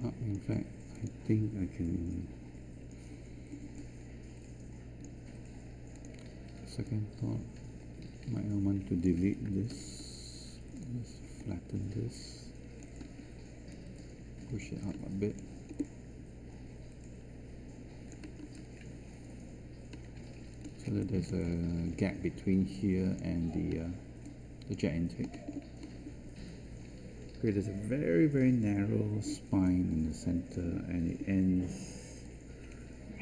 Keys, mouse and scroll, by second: 9.7 r, 13.0 w.